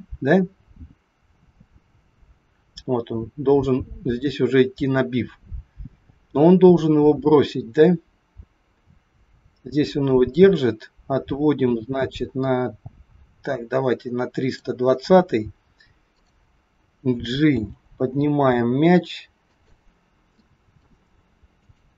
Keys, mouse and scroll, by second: 15.1 scroll down 2, 16.1 click, 17.4 g, 20.0 scroll up 2, 20.3 shift+middle click, 21.4 click.